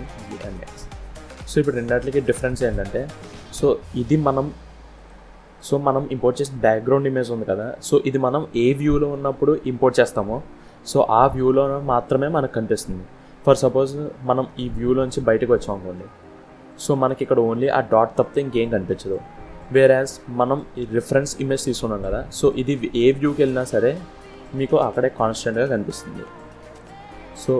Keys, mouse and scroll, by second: 3.2 click, 4.8 click, 5.4 click, 10.5-11.4 scroll down 1, 12.4-12.9 scroll up 1, 13.4 scroll down 2, 14.3 middle click, 20.2 click, 21.5 scroll down 1, 22.4 scroll down 1, 22.5 middle click.